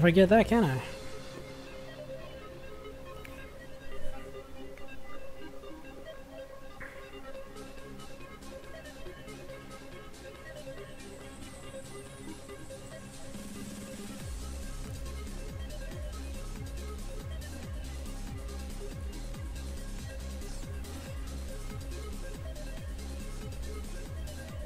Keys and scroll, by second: 3.4-11.3 typing, 13.1 space, 15.9-17.2 typing, 22.4 Right, 22.8 BackSpace.